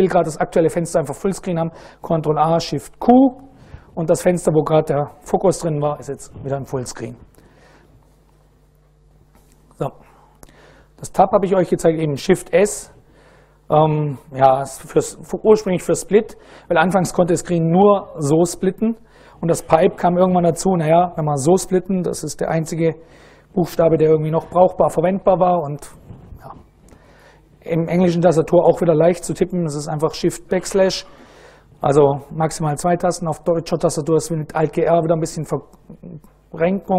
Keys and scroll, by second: 2.0 ctrl+a, 2.7 shift+q.